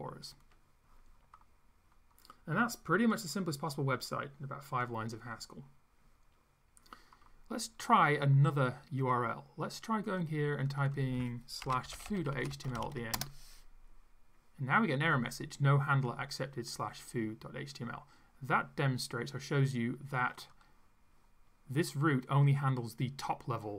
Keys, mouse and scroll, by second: 9.2 click, 10.1 click, 10.7 click, 11.4-13.4 typing, 20.4 click.